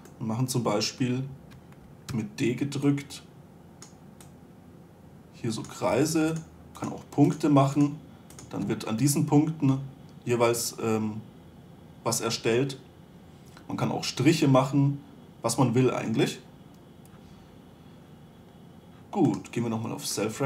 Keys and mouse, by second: 2.5-9.0 d, 3.3-6.6 drag, 6.8-8.7 drag, 10.2-12.2 drag, 15.9-19.7 middle drag, 19.7-20.4 right drag, 20.4 middle click.